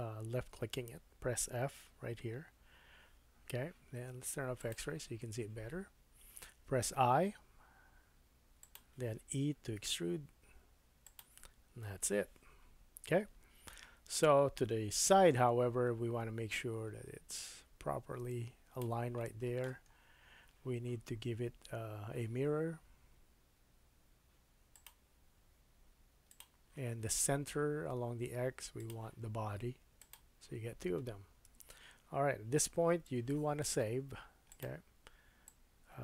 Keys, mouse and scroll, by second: 1.8 f, 4.6-8.7 drag, 6.6 i, 8.7 middle click, 9.8 e, 11.7 Tab, 12.7-13.8 scroll down 2, 13.8 KP_1, 15.0 KP_3, 15.0-16.5 middle drag, 16.5-28.9 drag, 19.2 middle click, 19.8-21.0 scroll down 2, 21.0-21.8 scroll down 3, 28.9-34.5 middle drag, 31.4 KP_1, 34.5-36.0 drag.